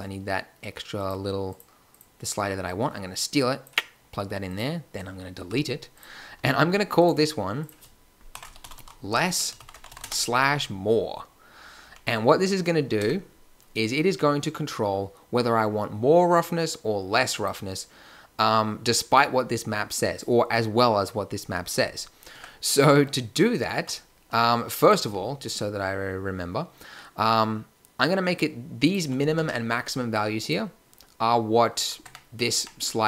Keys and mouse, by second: 5.4 x, 6.3 n, 8.7 s, 11.8 n, 13.0 Tab, 15.7 middle click, 22.3 Tab, 24.8 click, 25.0 n, 32.0 Tab, 32.5 Tab.